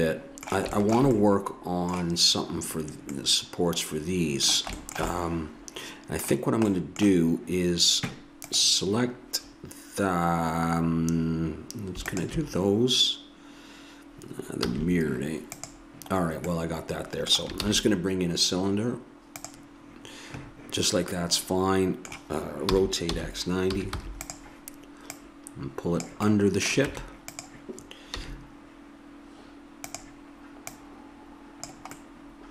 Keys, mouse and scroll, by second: 8.4-10.8 drag, 12.2-13.9 drag, 14.6 a, 15.5-16.5 drag, 16.5 middle click, 17.6 shift+a, 22.6 r, 25.1-26.8 drag, 27.4 Tab, 28.2 s, 30.7-31.9 drag, 31.9 middle click.